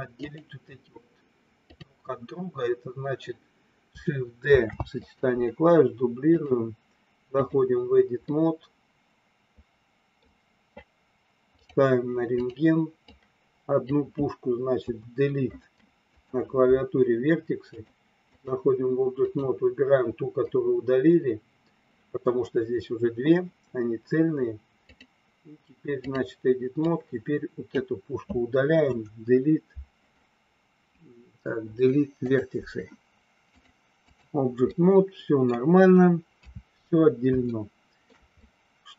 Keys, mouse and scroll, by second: 0.2 click, 1.5-3.3 drag, 4.5 shift+d, 6.3-7.6 drag, 8.3-10.2 middle drag, 12.4 click, 13.0 click, 14.8 Delete, 17.6 click, 19.3 click, 24.8-26.3 drag, 26.8-27.8 drag, 28.8 Delete, 31.5 Delete, 33.5 click, 34.6 middle click, 36.3 KP_3, 37.4 shift+middle click, 38.3 middle click.